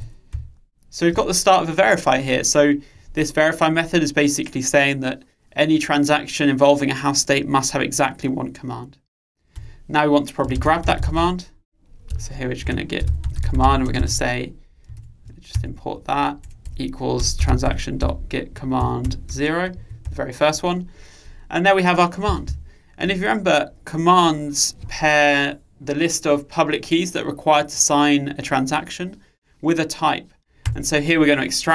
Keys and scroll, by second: 17.0 alt+Return, 21.0 Return.